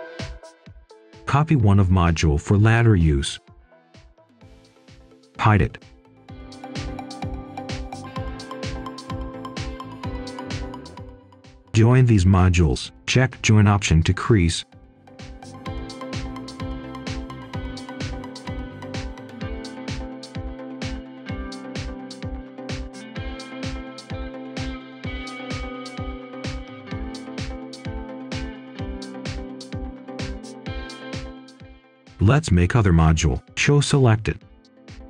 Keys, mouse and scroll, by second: 0.1 click, 1.4 scroll down 1, 1.6 click, 1.9 right click, 3.2-5.0 alt+drag, 5.5 click, 7.4-8.5 typing, 9.3 right click, 9.8 click, 10.8-11.8 typing, 14.2 click, 14.9 right click, 15.5 click, 16.2 Tab, 17.7-22.3 drag, 23.6 Return, 24.2 click, 24.5-27.4 right drag, 29.0 click, 30.7 shift+right click, 31.6-33.3 typing, 34.1 click, 34.3 right click, 34.8 click.